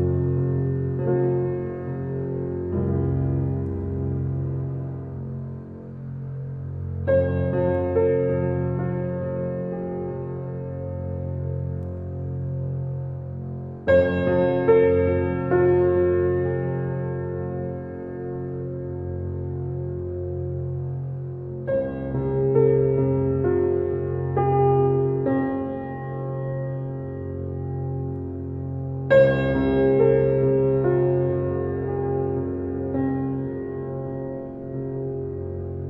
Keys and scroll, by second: 2.0 ctrl+a, 3.4 ctrl+j.